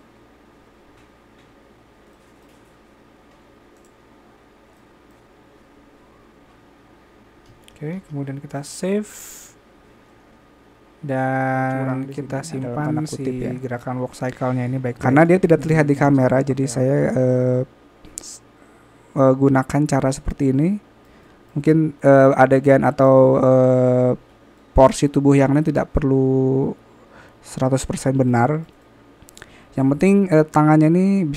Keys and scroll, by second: 3.4-3.9 typing, 6.0 alt+a.